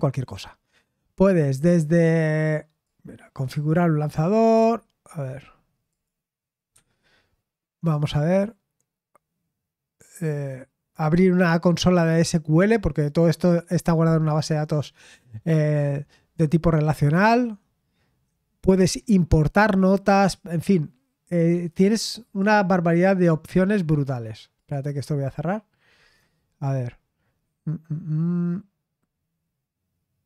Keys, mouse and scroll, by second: 2.8 click, 3.2 click, 5.9 click, 6.7 Escape, 7.9 click, 20.4-21.5 right drag, 21.5 Escape, 22.2 click, 24.5 click, 26.5 click.